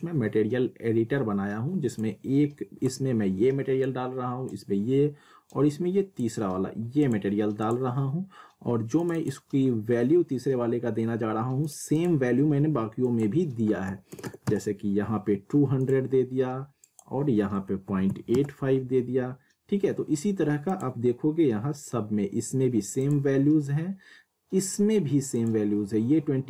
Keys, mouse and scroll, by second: 1.9-7.0 drag, 11.2 click, 11.6 click, 15.8 click, 20.7 click, 23.0 click, 25.3 click.